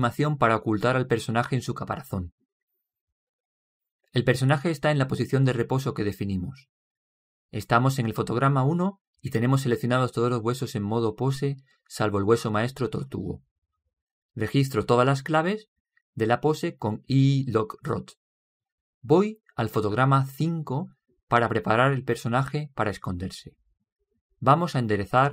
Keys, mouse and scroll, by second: 15.5 i.